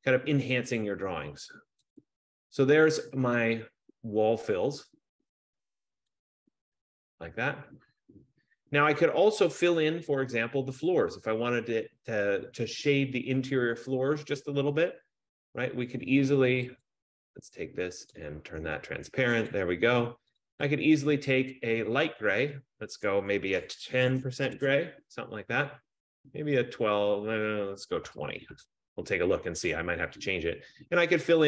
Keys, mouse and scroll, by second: 2.1 click, 6.4 click, 17.0 click, 18.3 click, 19.6 click, 20.5 click, 20.9 click, 23.2 click, 24.1-24.9 typing, 27.5 click, 28.2-28.8 typing, 30.6 click.